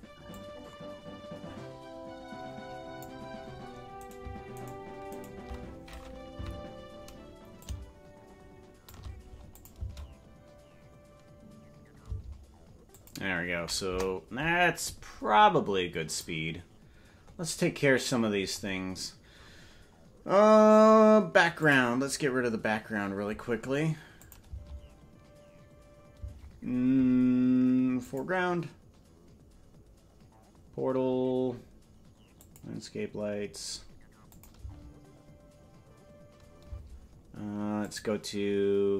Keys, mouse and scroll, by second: 0.4-3.1 drag, 4.1-5.3 right drag, 6.5 Left, 7.5-8.9 shift+drag, 9.6-12.5 drag, 9.8 space, 12.1 space, 13.0 click, 13.8 KP_0, 16.0 click, 17.2-18.8 scroll up 12, 18.8-22.4 scroll up 8, 22.4 click, 22.4 scroll up 2, 24.3-26.3 drag, 24.4 space, 26.2 space, 28.7 click, 33.1 click, 34.3 click, 34.5 space, 36.7 space, 37.8 click.